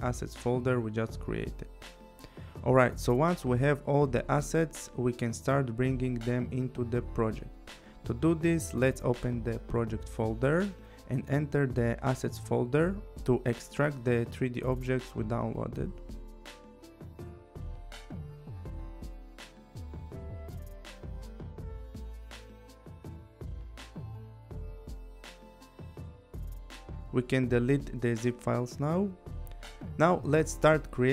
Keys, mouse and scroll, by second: 1.6 click, 5.6 click, 9.0 click, 10.2 click, 12.1 click, 13.0 right click, 14.6 click, 15.7 click, 18.1 click, 20.9 right click, 22.4 click, 23.5 click, 26.8 click, 27.5 click, 28.3 Delete, 30.2 click.